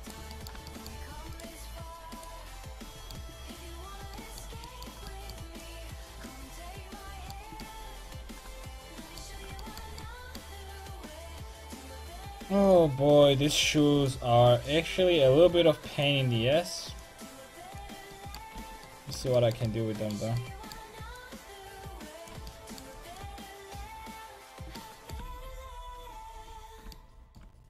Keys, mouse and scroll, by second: 0.4-1.4 middle drag, 1.4-4.1 right drag, 3.6-8.2 drag, 8.2-11.0 middle drag, 11.0-18.6 drag, 18.6 z, 18.7 click, 21.2-24.8 drag, 22.7-25.2 middle drag, 25.0 click, 25.9-27.6 middle drag, 27.2-27.6 drag.